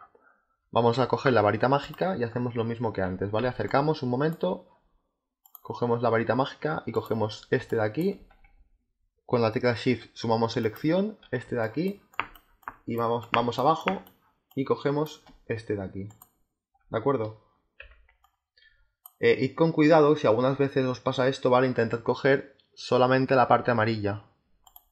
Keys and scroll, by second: 3.3 z, 7.5 space, 11.3 space, 17.7 z.